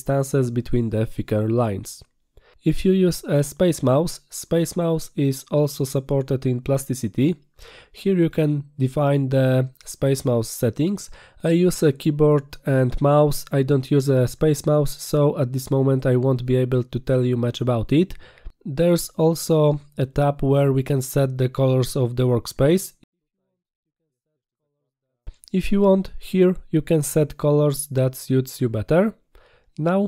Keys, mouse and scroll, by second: 0.2 click, 6.3 click, 10.2 click, 24.8 click.